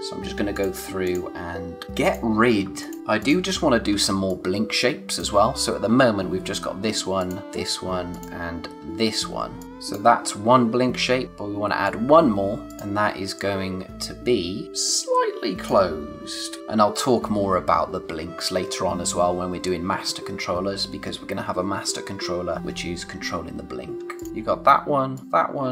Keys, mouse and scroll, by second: 4.0 space, 4.2 click, 4.5 space, 7.1 click, 11.2 click, 14.6 click, 16.6-17.2 scroll up 1.